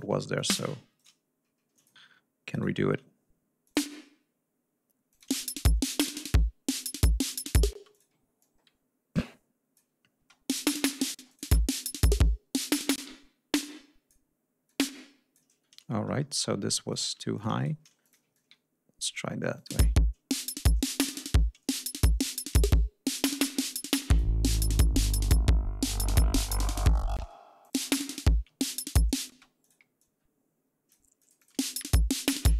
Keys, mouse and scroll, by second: 0.4 click, 1.0 shift+right click, 1.6 shift+click, 2.4 shift+right click, 3.5 click, 4.9 click, 5.1 space, 7.1 g, 7.3 ctrl+scroll down 2, 7.6 ctrl+space, 7.8 ctrl+click, 8.2-9.8 ctrl+drag, 10.0 space, 11.0 space, 11.1 click, 11.7 ctrl+scroll up 2, 12.4 click, 12.8 space, 12.9 e, 13.4 click, 14.5 click, 16.2 ctrl+scroll down 2, 16.7 ctrl+click, 17.0 ctrl+g, 17.2 ctrl+shift+click, 17.4 ctrl+shift+right click, 17.9 ctrl+shift+click, 18.5-19.2 ctrl+drag, 19.4 click, 19.6 space, 20.1 ctrl+scroll down 2, 20.5 ctrl+scroll up 2, 22.6 ctrl+scroll down 2, 23.0 ctrl+scroll up 2, 23.9 ctrl+click, 24.5-26.7 ctrl+drag, 27.0 space, 27.5 ctrl+click, 27.8 ctrl+scroll up 2, 28.3 ctrl+scroll down 2, 29.2 space, 29.5 ctrl+click, 29.8-31.0 ctrl+drag, 31.0-31.5 drag, 31.4 space, 31.6 ctrl+scroll up 2.